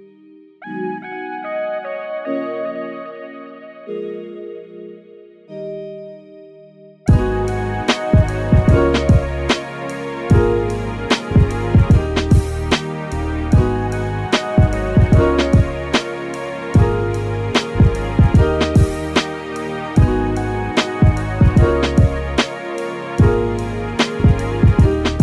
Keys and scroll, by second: 6.7 super+v, 19.7 super+v.